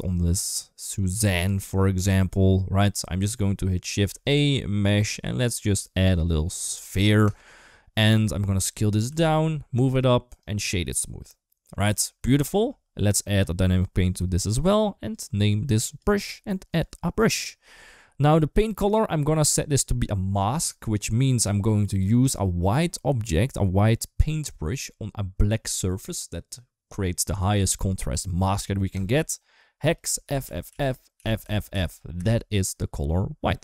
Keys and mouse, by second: 0.2-1.3 middle drag, 3.8 shift+a, 8.0 s, 9.8 g, 10.2 right click, 11.1 middle click, 11.7 g, 15.0-15.8 drag, 16.6-18.8 drag, 30.3 shift+f, 31.2 shift+f.